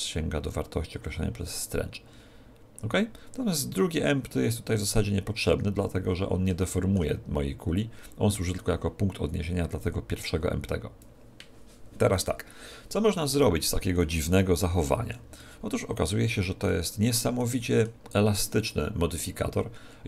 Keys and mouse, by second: 6.6-8.3 middle drag, 7.7 click, 14.0-19.1 middle drag, 15.0 z.